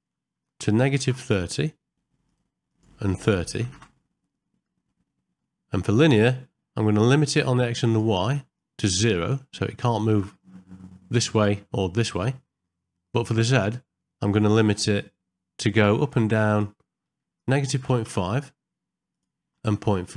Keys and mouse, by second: 2.7-3.8 drag, 4.9 middle click, 7.3 click, 8.6-10.3 drag, 13.7 middle click, 16.7-18.1 drag, 19.1-20.1 drag.